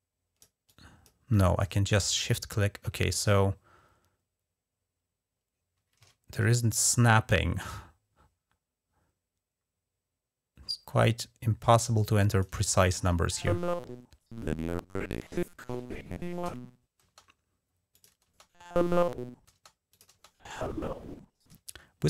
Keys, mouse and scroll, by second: 0.5 click, 1.1 click, 1.9-12.2 drag, 12.8 space, 16.8 space, 17.7 click, 18.0 space, 19.3 space, 19.7 click, 19.9 space, 21.3 space.